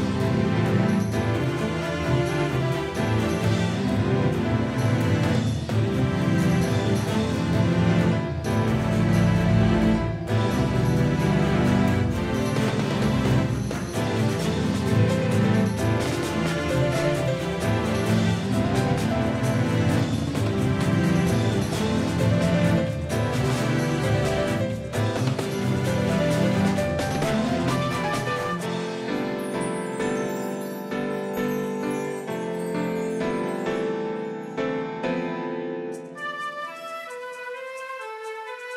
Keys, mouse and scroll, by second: 3.4-4.4 middle drag, 5.1-8.8 middle drag, 6.6-12.4 drag, 10.3-12.6 middle drag, 12.6 KP_3, 16.5-18.6 middle drag, 18.6-21.1 right drag, 30.5-33.8 right drag, 31.9-34.2 drag, 35.0-38.6 right drag, 36.0 s.